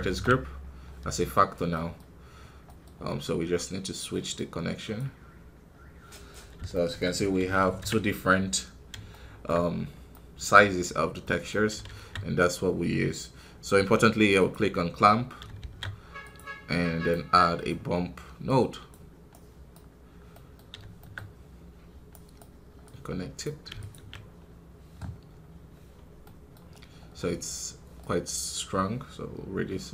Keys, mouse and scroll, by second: 1.6-4.9 middle drag, 4.9 click, 5.6-6.0 scroll down 1, 6.0 middle click, 6.2 scroll up 2, 6.6 shift+middle click, 7.1-8.6 scroll down 3, 8.6 scroll up 3, 9.0 shift+middle click, 9.7 scroll down 2, 10.0-14.3 middle drag, 14.3-17.5 drag, 17.5 shift+a, 18.8-20.2 drag, 20.2 middle click, 20.5 scroll up 1, 20.9-23.3 shift+middle drag, 23.3 click, 24.3-25.6 scroll down 3, 25.6 scroll up 2, 26.1-28.0 middle drag, 28.0-29.9 drag.